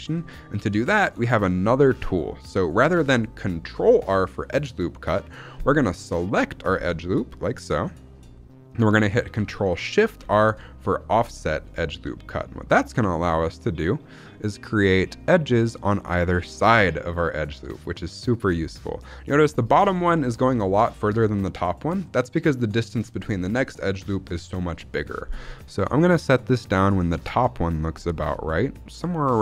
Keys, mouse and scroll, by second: 0.2-1.5 shift+middle drag, 1.5-1.8 scroll up 1, 10.2 ctrl+shift+r.